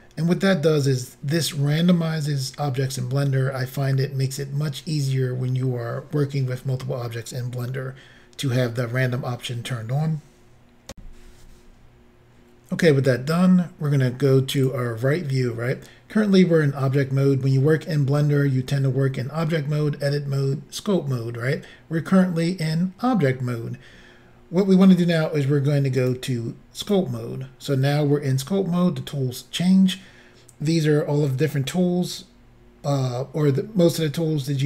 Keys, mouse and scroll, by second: 10.9 Insert, 14.6 click, 26.1 click, 26.9 click.